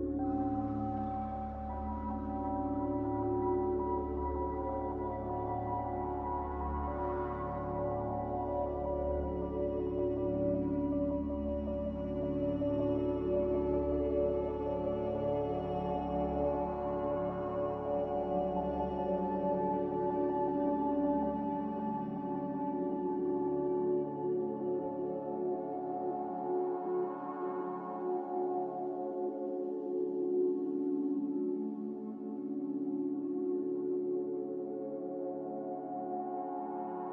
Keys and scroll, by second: 0.0 Escape, 0.1 Escape, 4.2 ctrl+z, 4.6 ctrl+z, 16.6 z, 21.8 z, 24.0 3, 24.3 Return, 33.1 a, 36.6 Delete.